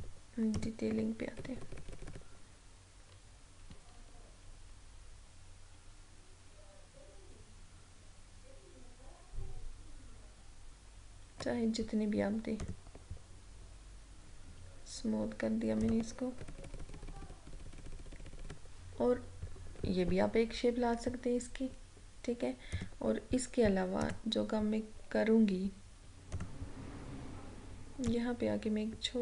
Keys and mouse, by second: 0.7 click, 1.5 Up, 12.7 click, 15.8 click, 16.4 Up, 22.7 click, 26.3-29.2 drag.